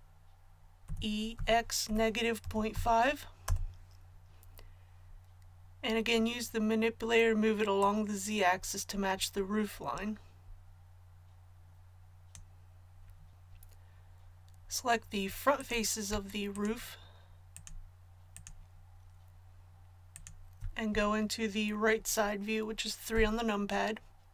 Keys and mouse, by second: 0.8 e, 7.8-23.1 drag, 23.1 KP_3.